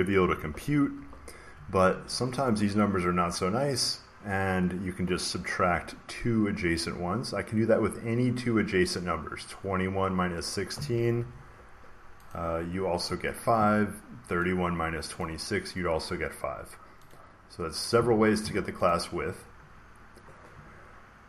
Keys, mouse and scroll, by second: 0.1-1.8 typing, 11.1 Return, 12.2 click, 12.9 click, 14.3 click, 15.1 click, 17.0 click, 18.8 click, 20.8 scroll down 2.